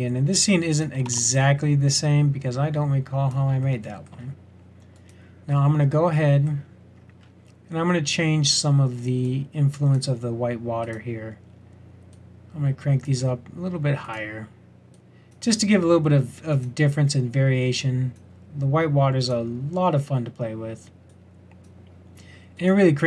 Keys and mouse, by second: 1.0 shift+d.